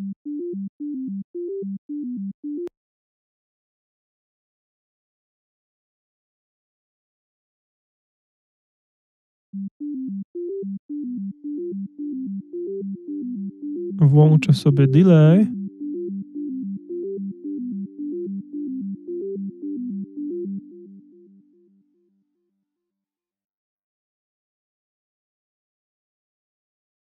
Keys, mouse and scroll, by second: 26.1 F1.